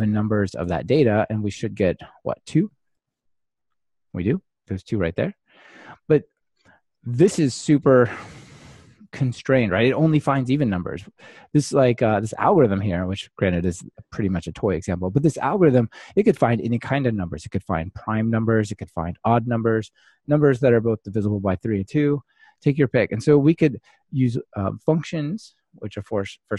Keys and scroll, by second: 3.1 ctrl+r.